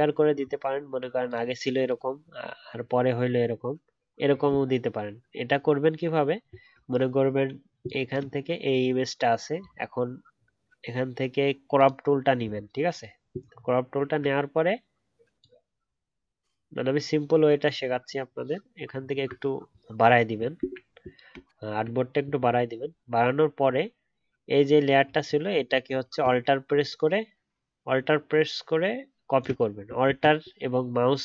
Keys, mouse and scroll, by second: 4.5-5.0 alt+scroll down 1, 6.8-10.1 alt+scroll up 1, 13.4-15.7 alt+scroll down 1, 21.5-24.7 alt+scroll up 1, 25.2 alt+click, 25.3 alt+double click, 30.0 ctrl+z.